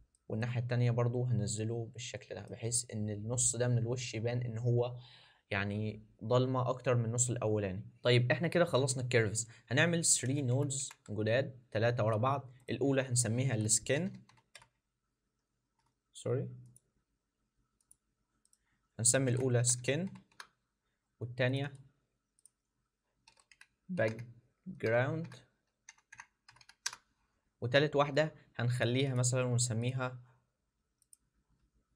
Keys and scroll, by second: 10.2 alt+s, 10.5 alt+s, 10.8 alt+s, 14.6 shift+s, 15.6 ctrl+z, 23.2 shift+b.